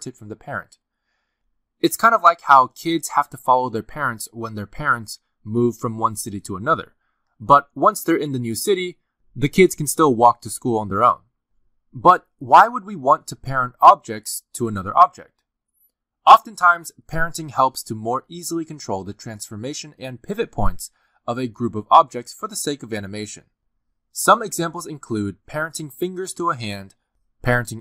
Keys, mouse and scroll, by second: 1.1 r, 1.6 r, 25.7 middle click, 26.3 click, 26.4 r, 26.9 shift+middle click, 27.0 r, 27.4-27.8 scroll down 2, 27.6 middle click.